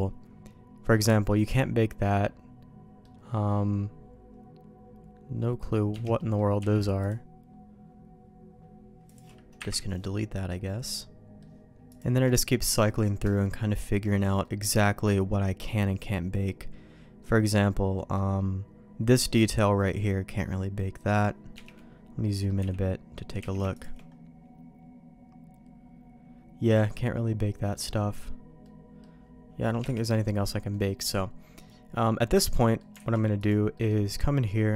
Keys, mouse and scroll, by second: 0.9-6.1 middle drag, 6.1 middle click, 6.6 q, 9.8 Delete, 10.9 middle click, 11.7 shift+q, 13.4-21.7 middle drag, 22.2 middle click, 22.6 w, 23.1 middle click, 23.4 q, 28.6-30.0 middle drag, 30.7-32.4 middle drag, 32.5 middle click, 33.1 alt+a, 33.4 click, 33.7 middle click.